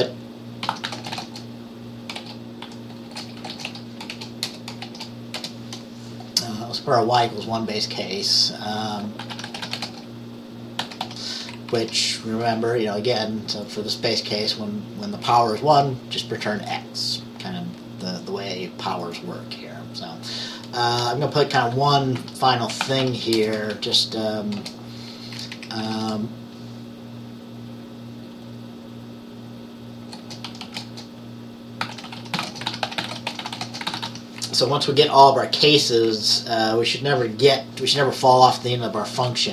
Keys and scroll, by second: 0.0-5.4 typing, 9.2-11.6 typing, 11.8 Down, 21.1 Return, 22.2-23.8 typing, 24.7 Return, 25.5 Up, 25.6 Up, 25.9 Right, 26.1 Right, 30.5-34.7 typing, 35.6 Down, 36.2 Down.